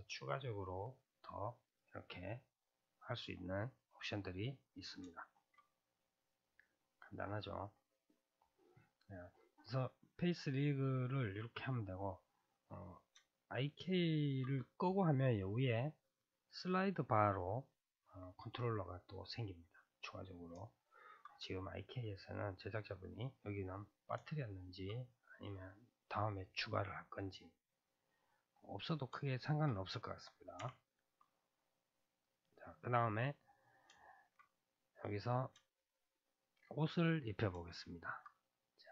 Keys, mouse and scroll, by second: 2.3-8.0 middle drag, 8.0 scroll down 1, 8.0-10.7 middle drag, 10.7-11.7 scroll down 1, 11.7-13.3 scroll down 1, 13.3-20.7 shift+middle drag, 20.7 scroll down 1, 20.7-30.6 shift+middle drag, 30.6 n, 32.2 click, 33.4-34.4 middle drag, 34.4-35.0 scroll up 2, 35.0-36.8 middle drag, 36.8-37.7 scroll down 2, 37.7-38.4 shift+middle drag, 38.4-38.9 scroll down 2.